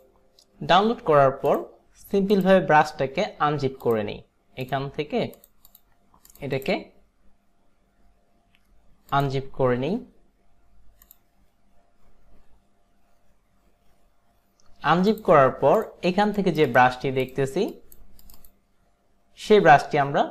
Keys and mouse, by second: 1.6 click, 2.4 click, 3.9 click, 5.5 click, 5.8 click, 6.6 right click, 6.6 click, 9.2 click, 15.2 click, 16.4 click, 16.7 click.